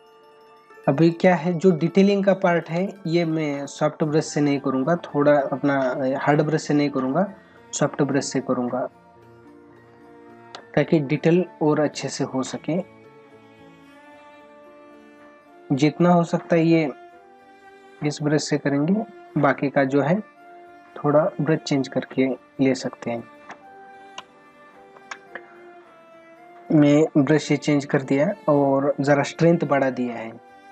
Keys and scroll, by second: 8.7 ctrl+=, 10.0 space, 10.8 ctrl+=, 12.0 space, 20.1 ctrl+=.